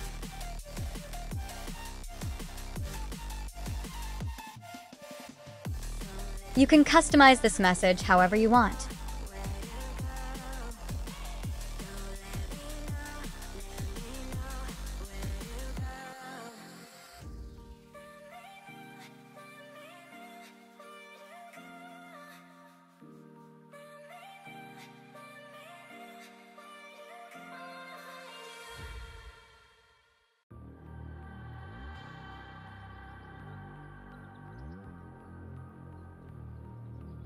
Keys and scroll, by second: 20.1 super+c, 23.4 super+v.